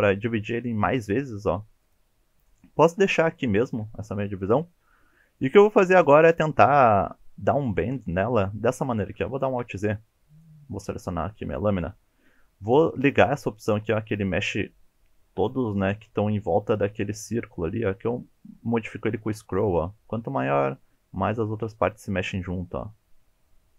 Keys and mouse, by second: 1.8 click, 3.4 shift+middle click, 4.6-5.5 shift+middle drag, 7.1 1, 9.0 alt+z, 9.5 shift+click, 10.0 click, 13.6 click, 15.5 g.